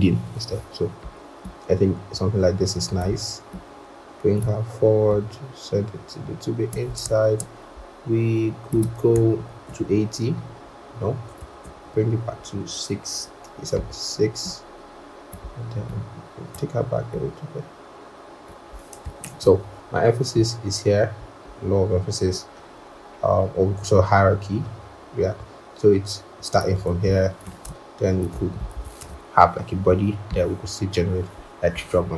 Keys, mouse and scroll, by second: 9.3 shift+Up, 11.6 Down, 11.9 Down, 12.0 Down, 13.0 Down, 15.4 Up, 19.1 ctrl+=, 20.0 scroll down 1, 21.2 scroll, 27.4 alt+click, 28.7 double click, 28.9 ctrl+a, 29.8-30.8 scroll.